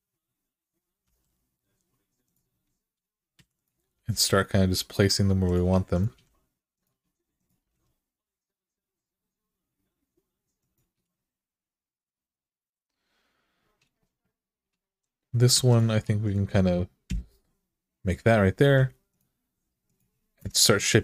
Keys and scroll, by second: 0.8 e, 3.1-3.7 typing, 5.9 g, 7.4 g, 15.3 2, 16.8 f, 18.4 k, 20.2 Return.